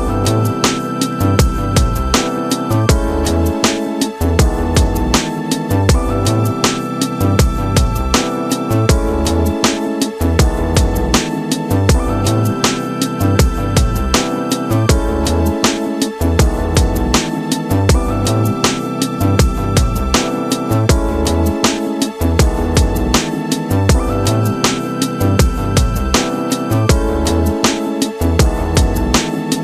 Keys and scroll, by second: 13.0 space, 16.0 w, 19.2 Return, 19.8 ctrl+b, 20.8 Return, 21.4 ctrl+KP_Subtract, 22.5 ctrl+y, 23.2 Return.